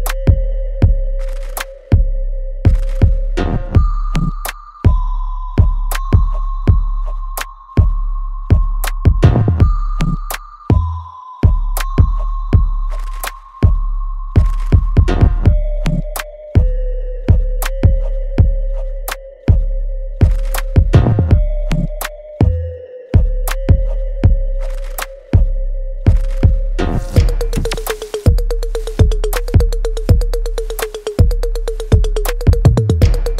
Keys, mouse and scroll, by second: 2.1 space, 3.1 alt+middle click, 4.2 click, 4.9 right click, 5.9-7.4 drag, 7.4 alt+right click, 8.7 click, 9.9 click, 10.2 w, 10.5 click, 11.5 e, 13.0-15.5 drag, 17.1 w, 17.7-19.4 drag, 19.4 space, 20.6 alt+right click, 21.8 click, 23.1 right click, 23.6 click, 24.0 alt+click, 25.2 right click, 26.3 click, 26.6 alt+right click, 26.9-28.6 alt+drag, 28.6 alt+right click, 29.2 click, 29.2-32.3 alt+drag, 32.3 alt+middle click, 33.0-33.3 alt+right drag.